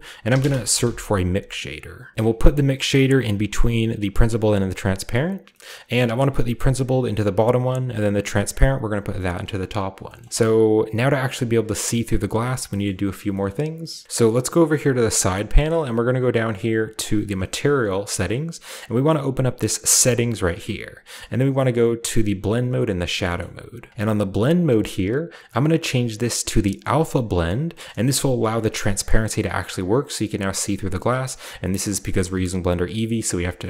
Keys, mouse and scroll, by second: 0.0-0.8 typing, 4.2 click, 5.3-5.6 scroll up 2, 5.5 middle click, 6.7-10.3 drag, 7.2 scroll up 1, 10.0-11.8 shift+middle drag, 10.3-11.8 shift+scroll down 1, 12.0-12.7 middle drag, 12.8 middle click, 13.4-14.0 scroll up 1, 13.4 middle click, 14.3 click, 15.2 scroll down 2, 16.9 click, 19.0 click, 19.3-21.4 drag, 20.3-22.1 scroll down 1, 23.0-23.9 scroll down 1, 23.2 middle click, 24.5-26.1 drag, 26.8 click, 27.7 middle click, 28.2-30.5 scroll up 2, 30.7-31.2 scroll down 2, 31.2 scroll up 2, 31.9 scroll down 1, 33.1-33.5 middle drag, 33.2 scroll up 1.